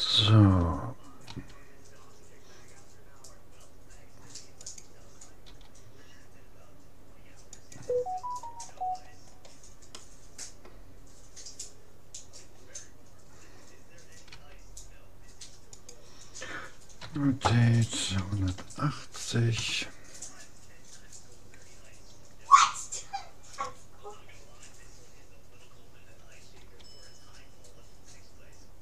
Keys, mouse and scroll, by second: 1.3 s, 5.5 g, 8.3-11.7 middle drag, 8.3-9.9 scroll up 1, 14.3 s, 17.1 r, 26.6 g.